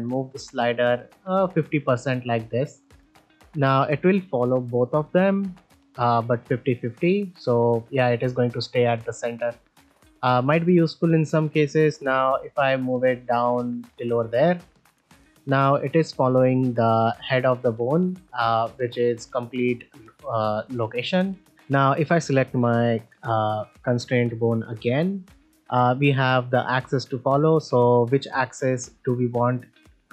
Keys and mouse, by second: 3.6 click, 5.1 g, 6.4 r, 6.6 r, 9.4 right drag, 11.7-13.8 drag, 15.6 r, 17.7-18.2 right drag, 18.2 g, 20.8 g, 28.4-28.8 middle drag.